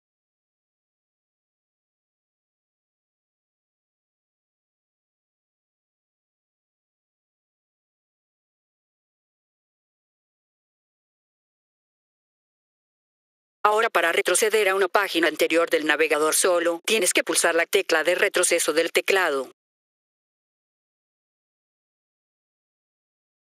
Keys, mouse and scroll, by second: 0.7 click, 5.3 ctrl+Num_Lock, 6.7 click, 12.3 F4, 13.5 click, 16.5 click.